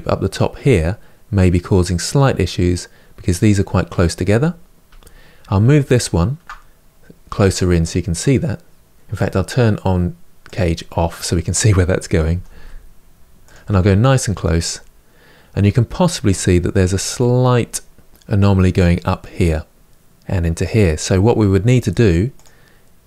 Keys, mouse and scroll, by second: 0.3 Tab, 4.0 Tab, 4.6 Tab, 5.7 alt+click, 7.1 g, 8.9 ctrl+z, 10.2 click, 11.0-12.1 middle drag, 12.1 g, 13.4 Tab, 13.8-17.9 middle drag, 17.9-19.7 scroll up 1, 19.7-21.0 middle drag, 21.0 Tab, 21.3-22.1 middle drag, 22.1 click, 22.9 g.